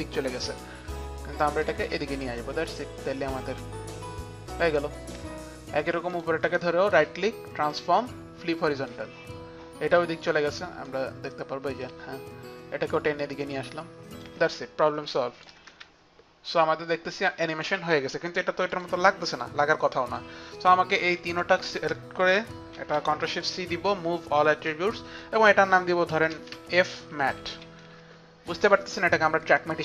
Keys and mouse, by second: 0.7 click, 0.7 click, 2.9 shift+click, 6.2 click, 6.5 right click, 7.8 click, 8.8 click, 10.7 click, 11.9 click, 13.0 shift+click, 15.2 click, 15.8 space, 16.1 space, 17.5 click, 17.5 space, 18.7 click, 19.4 click, 20.2 click, 21.4 shift+click, 22.6 shift+click, 22.9 ctrl+shift+c, 22.9 shift+click, 24.4 ctrl+shift+c, 24.4 shift+click, 26.0-28.4 typing, 29.4-29.8 typing, 29.6 click.